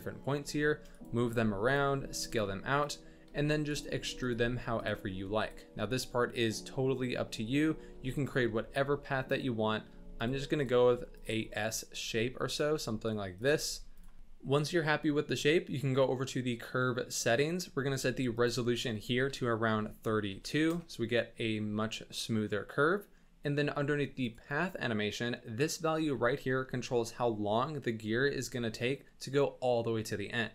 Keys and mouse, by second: 0.4 g, 1.2 r, 1.9 s, 2.8 click, 3.3 g, 3.9 s, 4.3 r, 5.0 g, 7.8 e, 8.4 r, 9.9 s, 10.9 s, 11.7 click, 12.0 e, 12.7 r, 13.5 g, 16.4 click, 18.3-20.7 drag, 24.2 click.